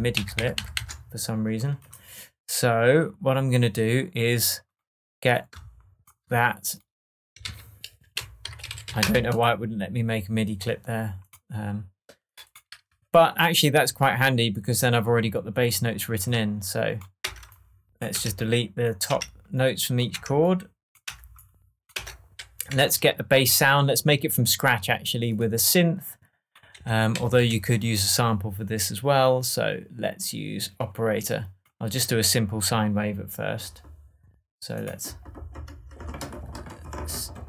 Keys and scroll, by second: 7.4 super+r, 8.1 shift+super+r, 8.3-9.2 typing, 17.2 BackSpace, 22.6 shift+BackSpace, 22.7 shift+Tab, 26.7 Up, 27.1 Down.